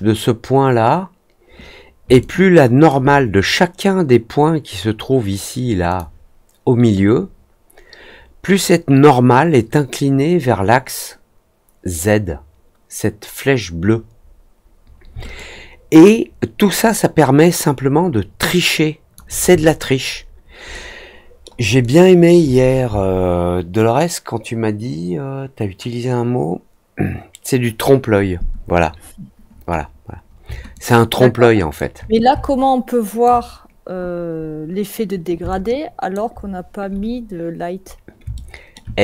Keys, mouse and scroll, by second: 2.1-2.8 alt+drag, 5.8 click, 15.3-19.1 alt+drag, 19.6 alt+middle click, 20.1 alt+middle click, 20.7 alt+middle click, 21.7 alt+click, 30.7-31.7 alt+drag, 32.3 alt+click, 35.4-36.1 alt+drag, 37.1-37.9 scroll up 3, 38.3 alt+middle click.